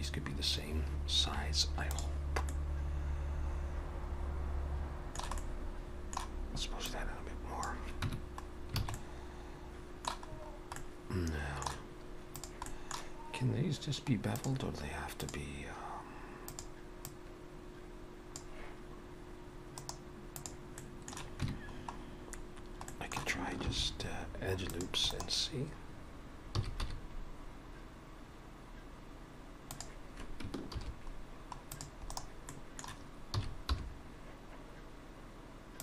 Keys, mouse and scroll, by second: 2.5 middle click, 5.3 middle click, 6.9 click, 8.1 Tab, 8.5 scroll down 2, 8.8 alt+a, 9.0 middle click, 10.3-10.7 scroll up 4, 10.8 middle click, 12.4 click, 12.7 middle click, 14.4 click, 16.5 click, 17.0 click, 19.8 right click, 20.8 middle click, 21.4 Tab, 21.8 scroll up 1, 22.4 scroll down 1, 22.9 middle click, 22.9-23.3 scroll down 1, 23.7 ctrl+r, 26.6 s, 30.7 ctrl+r, 32.5 middle click, 33.4 s.